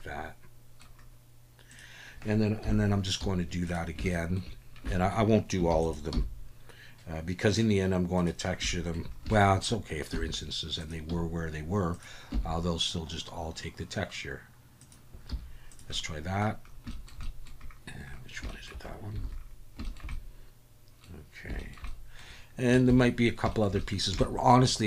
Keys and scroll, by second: 2.6 KP_7, 3.2 z, 5.7 shift+d, 6.1 g, 10.1 r, 11.1 g, 12.3 r, 15.3 z, 19.2 alt+a, 22.9 ctrl+s.